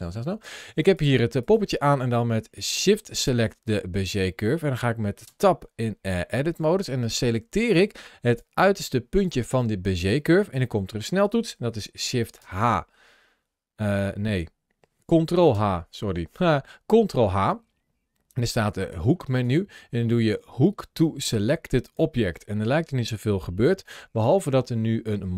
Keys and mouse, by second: 0.0 n, 0.7 click, 3.0 shift+click, 4.0 middle click, 5.1 Tab, 7.1-8.3 drag, 12.2 shift+h, 15.3 ctrl+h, 24.0 ctrl+shift+a.